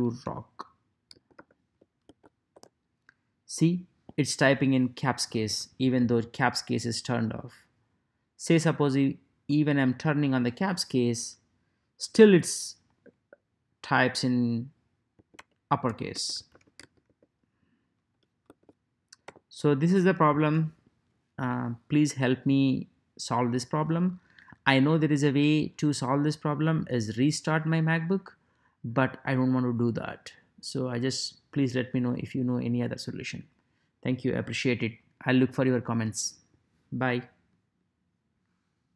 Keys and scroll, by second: 0.0-2.0 typing, 2.5 Return, 9.5 Caps_Lock, 14.9-18.5 typing, 19.2 Return.